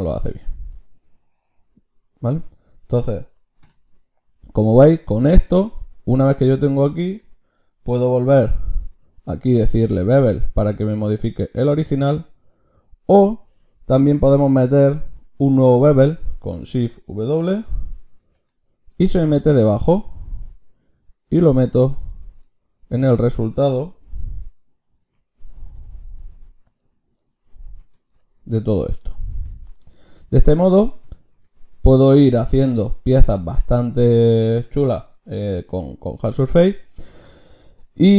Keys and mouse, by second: 2.4 f, 3.7 h, 5.5-7.2 drag, 8.7 ctrl+shift+q, 22.5-26.7 drag.